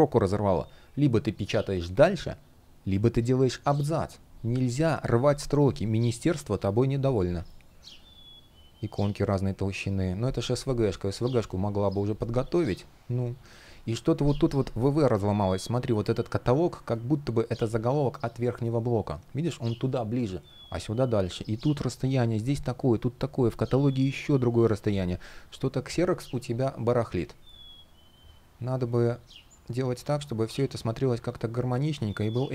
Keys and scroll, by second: 28.7 ..